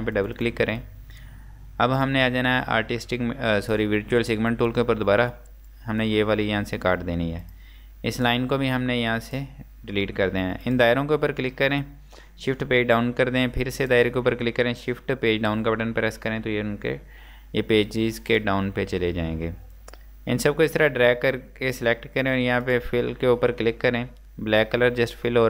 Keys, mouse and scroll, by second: 10.0 Delete, 10.6 click, 12.9 shift+Page_Down, 13.8 click, 15.6 shift+Page_Down, 16.8-17.1 scroll down 1, 18.4 click.